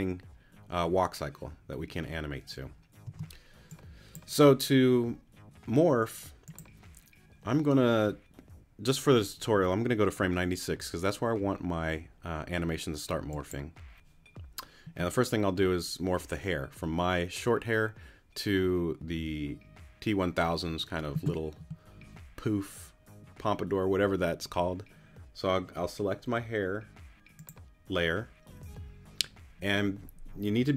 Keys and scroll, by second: 3.0 space.